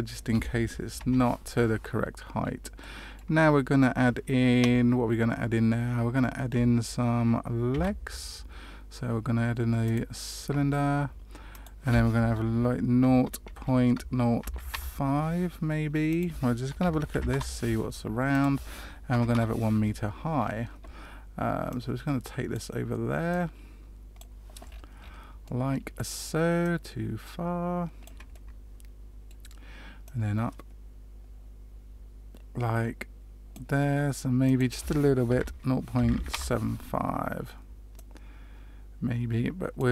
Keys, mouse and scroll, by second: 0.9 KP_Decimal, 2.3-2.7 scroll down 2, 2.7 middle click, 7.7 shift+a, 11.5 click, 16.0 click, 18.3 click, 20.3-21.4 scroll down 1, 21.4 scroll down 3, 21.6 click, 23.2 click, 24.6-25.5 scroll up 6, 25.4 middle click, 26.6 click, 28.3 middle click, 30.0 click, 34.4 click, 37.9 click.